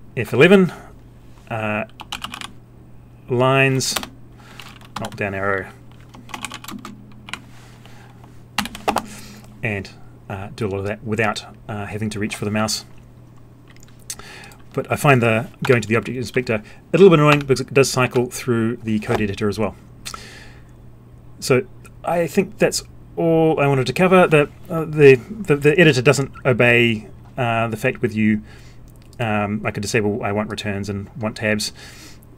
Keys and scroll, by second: 5.0 alt+Down, 8.6 alt+o, 15.6 F11.